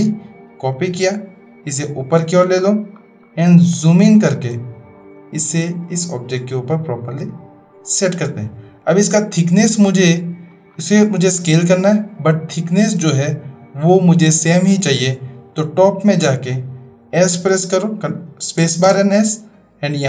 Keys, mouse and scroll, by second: 0.0 ctrl+v, 0.7-2.4 drag, 3.8-4.4 shift+middle drag, 5.3-8.2 drag, 10.0-10.5 middle drag, 11.5-11.9 drag, 18.5 space.